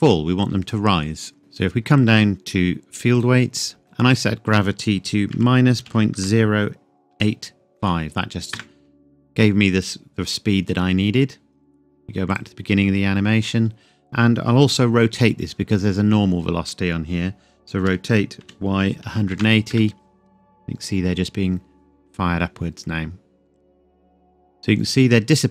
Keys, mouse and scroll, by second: 1.4-3.1 scroll down 1, 3.1 click, 3.6 scroll down 1, 4.1 click, 5.3 KP_Subtract, 6.2 KP_0, 8.5 KP_Enter, 12.3 click, 17.8 r, 18.4 y, 19.0 KP_1, 19.7 KP_Enter, 21.0-22.9 scroll down 1, 22.9-23.7 scroll up 1.